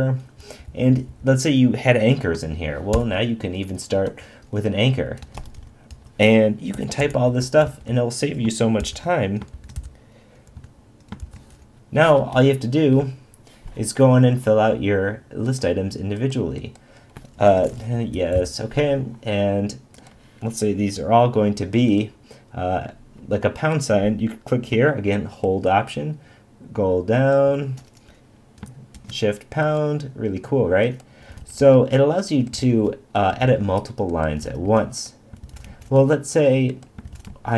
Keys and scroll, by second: 0.4 Right, 7.1 shift+", 7.6 shift+", 8.8 shift+>, 9.5 shift+<, 11.2 shift+>, 17.5 shift+t, 18.2 Down, 18.3 Left, 28.9 shift+#.